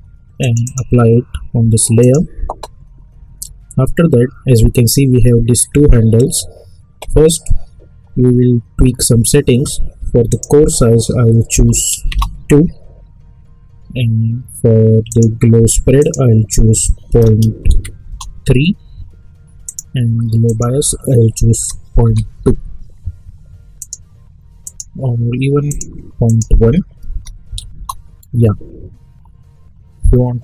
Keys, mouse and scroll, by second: 0.5 click, 10.2 click, 12.1 Return, 15.0 click, 18.0 Return, 19.6 click, 22.3 Return, 23.8 click, 27.7 Return.